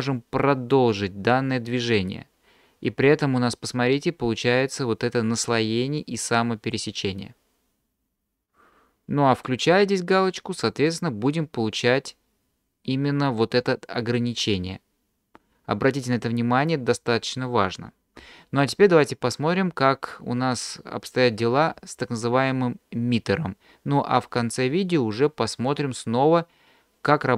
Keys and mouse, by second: 10.6 click, 11.9-13.6 drag.